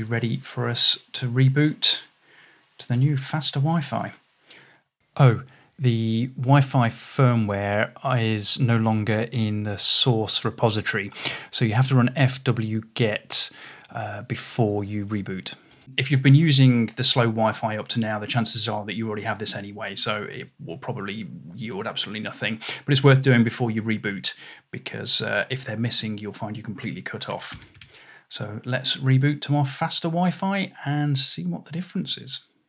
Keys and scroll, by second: 2.3 typing, 8.8 typing, 10.8-12.7 typing, 14.1 typing, 27.1-28.3 typing.